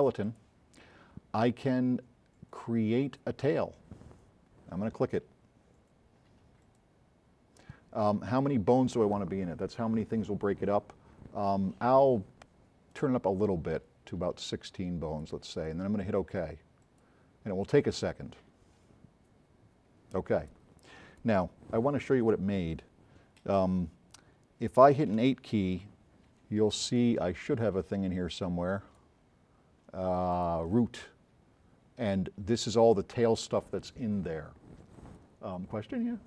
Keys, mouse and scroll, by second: 0.3 click, 6.6 click, 13.0-13.8 drag, 16.9 click, 25.2 8, 28.2-29.1 drag, 30.4 click.